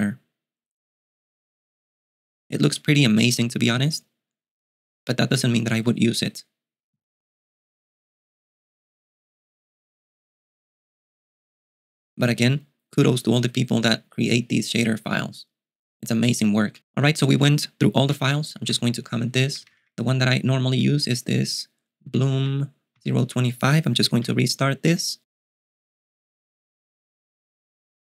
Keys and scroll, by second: 18.1-23.0 typing, 24.4 super+q.